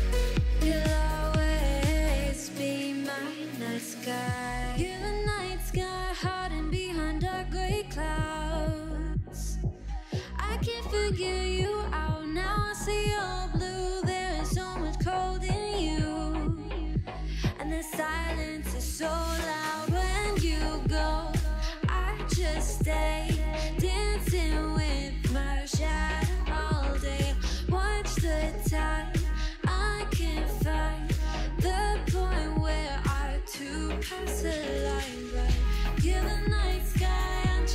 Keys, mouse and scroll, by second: 0.3 alt+z, 0.6-1.0 scroll up 3, 1.0-3.1 shift+middle drag, 3.1 shift+a, 6.3 g, 7.2-7.8 scroll down 2, 7.8 click, 8.1 g, 8.9 click, 9.1 scroll up 1, 9.3 shift+middle click, 9.5 s, 10.7 s, 14.5 g, 15.3 s, 15.8-16.1 scroll up 1, 16.1 g, 17.6 shift+d, 19.1-19.6 scroll down 2, 19.6 KP_3, 20.0 middle click, 20.5 l, 20.8 KP_3, 22.6 g, 24.0 shift+middle click, 24.1 scroll up 2, 24.3 shift+middle click, 25.2 g, 26.1 1, 26.2 click, 26.9 middle click, 27.7 KP_3, 28.4 g, 30.3 click, 30.7 g, 31.9 g, 33.4 alt+z, 33.5 middle click, 34.4 ctrl+r, 36.9 click, 37.0 click, 37.2 click, 37.4 click, 37.5 click.